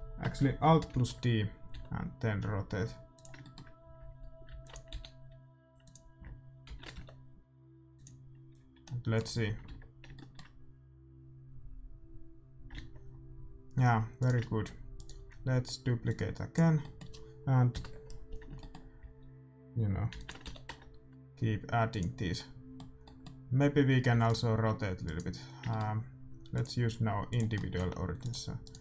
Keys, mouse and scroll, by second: 0.9 alt+d, 3.4-4.4 middle drag, 4.4 alt+d, 4.9 r, 6.6 alt+d, 8.5 a, 8.8-11.2 middle drag, 9.6 alt+a, 12.7 alt+a, 14.3-16.9 right drag, 16.1-17.9 drag, 16.8-20.4 middle drag, 17.7 KP_7, 20.1 alt+d, 20.4 r, 22.3-25.0 middle drag, 24.1 a, 24.3-26.1 right drag, 24.6 r, 25.6 middle click, 26.5-28.4 drag, 27.7 r.